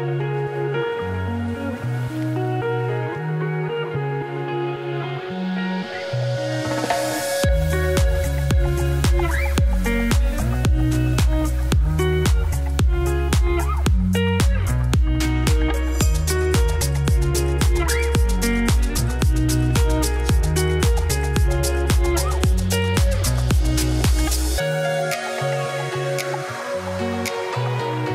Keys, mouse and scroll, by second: 1.5-2.6 scroll up 1, 2.6-3.0 scroll up 1, 3.0 z, 3.2-10.2 drag, 10.2-11.3 middle drag, 11.3 Tab, 11.4 s, 12.8 middle click, 13.1 scroll down 1, 13.3 middle click, 13.9 click, 14.6 z, 14.8 shift+click, 15.6-16.4 scroll up 2, 15.7 shift+middle click, 16.4-17.6 drag, 17.8-19.0 shift+drag, 19.1 click, 19.6 middle click, 20.1 Tab, 20.3 click, 20.5 middle click, 20.8-21.8 drag, 21.8 scroll down 1, 22.0 middle click, 22.2 Tab, 24.1-25.9 middle drag, 25.9-26.5 scroll up 1, 26.5 middle click, 26.7 scroll up 1, 26.9 Tab, 27.2 click, 27.4 shift+click, 27.7 middle click, 27.9 g.